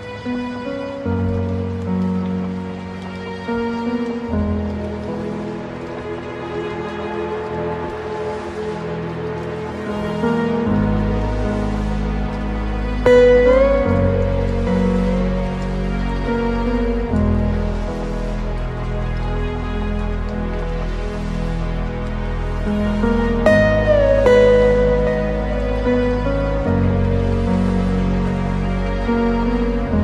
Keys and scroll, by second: 3.6 ctrl+t, 8.8 ctrl+alt+space, 14.9 ctrl+z, 20.3 ctrl+space, 28.1 ctrl+space.